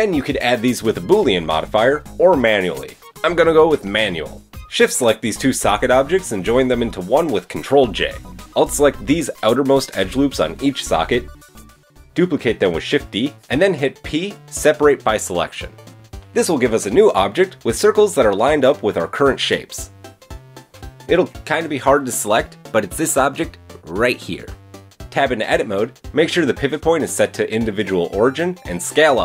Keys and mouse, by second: 0.5 Tab, 1.2 click, 1.4-4.8 middle drag, 4.8 shift+click, 5.0-8.7 shift+middle drag, 5.9 ctrl+j, 6.7 Tab, 8.7-10.0 drag, 12.4 shift+d, 13.8 p, 14.8 Tab, 21.1 middle click, 22.1 click, 22.4 middle click, 22.4 right click, 25.0 Tab, 25.1 a, 25.5 KP_3, 27.7 s, 28.8-29.2 drag.